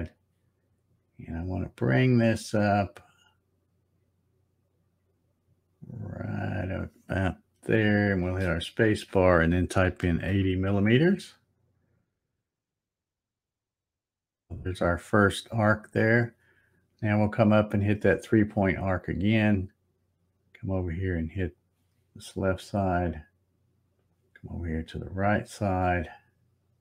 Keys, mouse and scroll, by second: 0.0 click, 8.2 space, 13.5 click, 18.3 click, 21.4 click, 23.9 click.